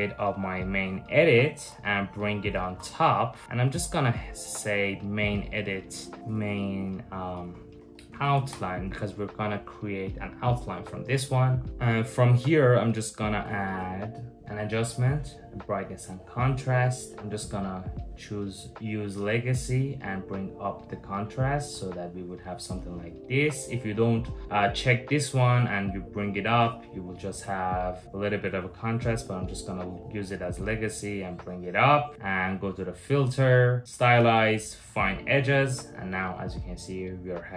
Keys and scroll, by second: 1.3 super+j, 2.3 shift+super+], 6.2-8.6 typing.